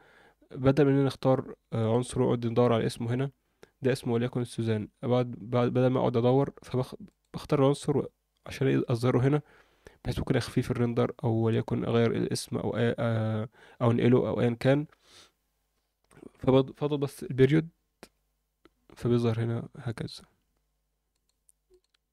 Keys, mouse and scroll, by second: 1.8 click, 7.0 click, 18.0 KP_Decimal, 21.1 click, 21.7 click.